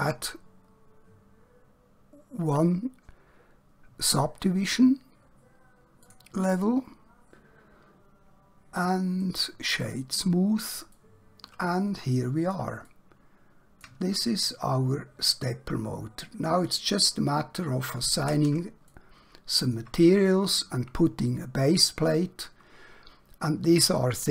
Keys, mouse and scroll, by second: 6.1 click, 9.2 right click, 9.8 click, 11.0 middle click, 12.9 shift+middle click, 14.4 middle click, 19.0 shift+middle click.